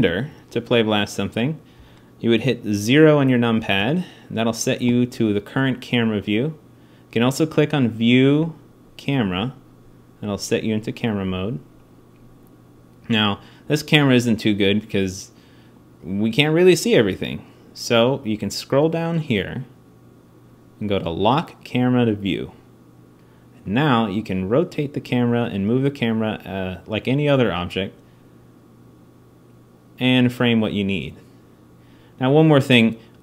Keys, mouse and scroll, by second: 0.1 alt+a, 3.4 KP_0, 13.5-16.9 drag, 21.9-27.1 drag.